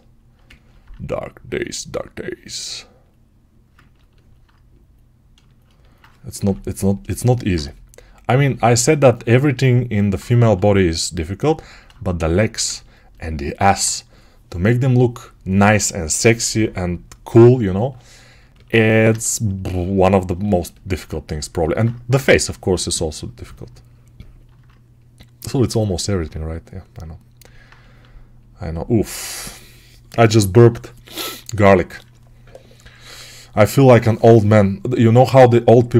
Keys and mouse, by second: 6.3 6, 10.3 g, 12.2-35.9 alt+right drag, 22.0 6.